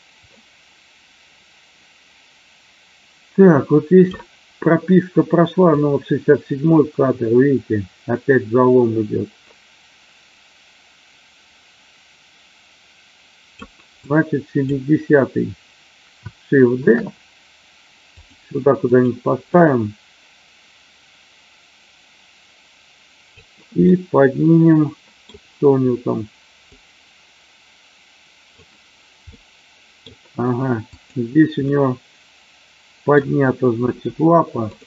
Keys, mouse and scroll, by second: 5.8-13.7 drag, 14.0-14.8 drag, 16.8 shift+d, 18.2 click, 18.8 click, 19.6-23.3 drag, 23.9-25.2 middle drag, 26.7-28.6 drag, 29.3-29.9 middle drag, 30.8 click, 31.6-33.1 middle drag, 33.8 r.